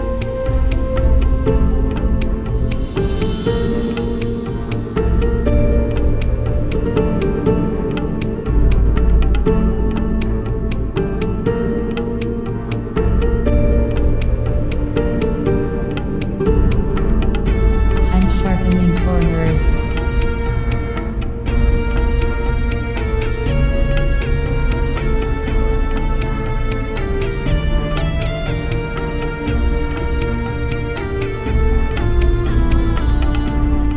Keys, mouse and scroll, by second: 1.7-4.3 right drag, 4.3-8.5 middle drag, 7.1-10.0 right drag, 10.0 middle click, 10.6-15.4 right drag, 12.2-15.8 middle drag, 17.3 ctrl+b, 18.9-21.0 drag, 19.8 Return, 20.3 BackSpace, 21.1-22.7 middle drag, 21.7 Tab, 22.7 ctrl+Down, 26.4 Tab, 26.8 middle click, 29.3-32.2 right drag, 32.2 middle click, 33.0 shift+e.